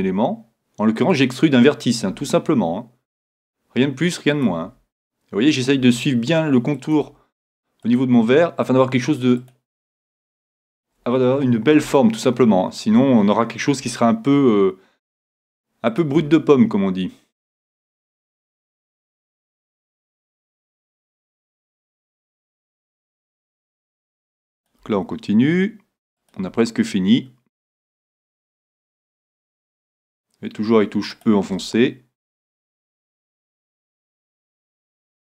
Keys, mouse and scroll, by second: 0.0 e, 2.1 e, 4.5-7.5 drag, 4.6 e, 6.0 e, 7.1 e, 8.2 e, 9.5-12.5 drag, 9.8 e, 11.9-13.9 middle drag, 13.9 e, 16.0-17.9 drag, 16.2 e, 18.1-20.0 drag, 18.4 e, 20.3-22.1 drag, 21.4-23.4 middle drag, 22.1 click, 23.4 e, 24.7-26.6 drag, 24.8 e, 26.5 e, 27.6-31.0 drag, 28.0 e, 29.5 e, 31.3-34.6 drag, 31.5 e, 33.4 e, 34.8-35.2 drag, 35.0 e.